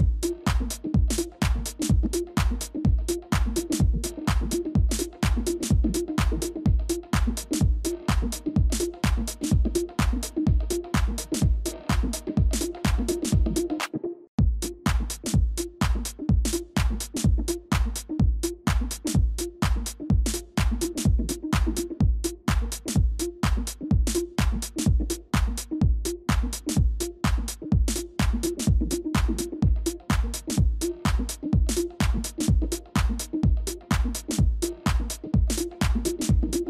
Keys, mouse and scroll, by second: 1.8 shift+click, 3.3 ctrl+-, 3.4 ctrl+-, 8.9 shift+click, 11.3 ctrl+-, 11.9 space, 12.9 ctrl++, 13.1 ctrl++, 15.6 shift+click, 18.0 scroll up 1, 21.1-21.6 scroll down 1, 24.0-25.9 scroll down 1, 25.9 scroll, 26.3 ctrl+g, 26.8 ctrl+-, 27.0 ctrl+-, 27.4 space, 32.5 ctrl+z, 33.9 ctrl+space, 34.8 ctrl+click, 35.1 shift+click.